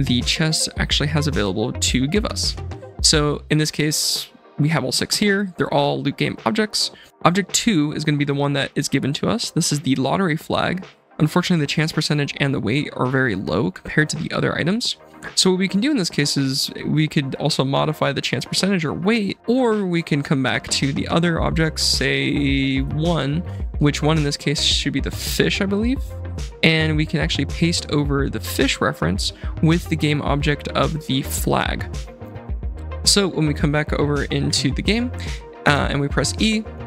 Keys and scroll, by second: 34.8 F7, 35.6 e, 36.7 s.